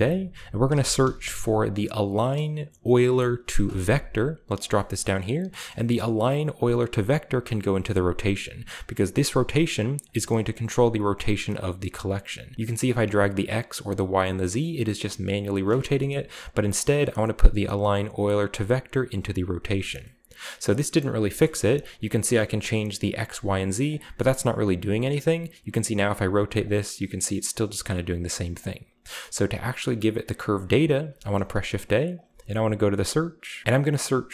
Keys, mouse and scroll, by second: 0.6-0.9 typing, 2.9 Return, 4.5-6.8 drag, 7.2-10.6 drag, 11.4 click, 12.8 click, 13.4 right click, 16.0-16.9 shift+scroll up 3, 16.7-17.6 drag, 18.0-19.7 drag, 19.7 shift+middle click, 20.6 middle click, 21.0 shift+middle drag, 21.4-22.0 shift+middle drag, 21.5-22.5 scroll up 1, 21.7-22.5 drag, 22.6 click, 23.2 drag, 23.8 drag, 24.2 drag, 24.9-26.0 drag, 26.0 middle click, 26.6 click, 27.8 click, 28.5 click, 29.0 middle click, 29.0-29.9 scroll up 1, 29.2 click, 30.7-31.4 middle drag, 31.1 shift+a, 32.1 click, 33.6 typing.